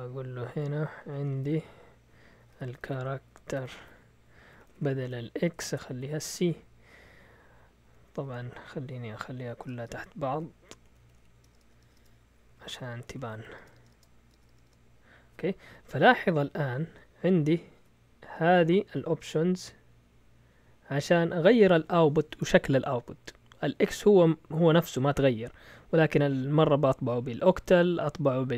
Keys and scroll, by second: 0.0-7.8 typing, 6.9 Left, 9.6-14.6 typing, 10.3 Up, 10.9 Left, 12.5 Up, 12.7 Left.